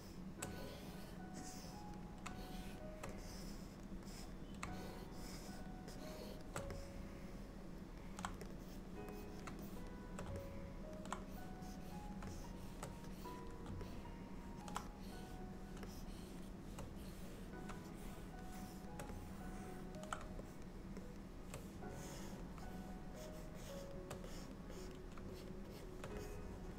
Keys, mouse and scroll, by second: 0.6 click, 1.5 click, 2.5 shift+click, 3.3 click, 4.2 click, 4.8 shift+click, 5.4 shift+click, 6.2 click, 6.8 middle click, 8.5 click, 8.7 click, 9.7 shift+click, 9.8 shift+click, 10.4 middle click, 11.4 click, 11.9 click, 12.3 shift+click, 12.3 click, 12.9 shift+click, 13.2 click, 13.9 middle click, 14.8 click, 15.1 click, 15.9 shift+click, 16.4 shift+click, 17.1 click, 18.1 shift+click, 18.8 shift+click, 19.2 middle click, 20.6 shift+click, 21.1 shift+click, 22.1 click, 22.8 shift+click, 23.3 shift+click, 24.1 shift+click, 24.3 click, 24.8 click, 25.4 shift+click, 25.8 shift+click, 26.2 middle click.